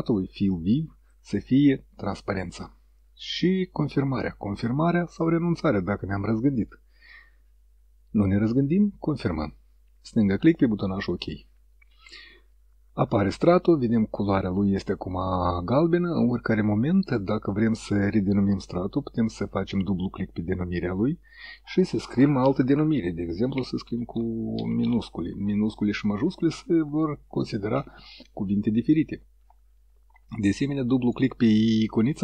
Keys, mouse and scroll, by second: 9.4 click, 19.5 click, 23.3-25.3 typing, 27.2 KP_Subtract, 29.1 KP_Enter, 32.0 click.